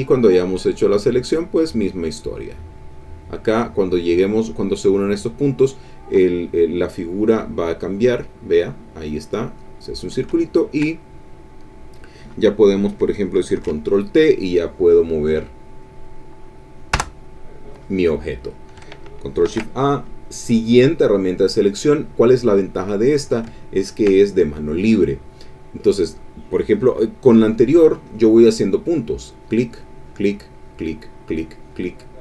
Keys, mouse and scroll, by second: 0.1 click, 0.5 click, 1.0 click, 1.5 click, 1.9 click, 2.2 click, 2.7 click, 9.1 click, 10.3 ctrl+click, 10.9 ctrl+click, 11.5 ctrl+middle click, 11.7 click, 13.5 ctrl+t, 14.2-16.0 drag, 17.0 Return, 19.4 ctrl+shift+a, 20.0 shift+click, 21.7 click, 22.5 click, 23.5 ctrl+click, 28.0 click, 29.4 click, 30.0 click, 30.6 click, 31.1 click, 31.7 click.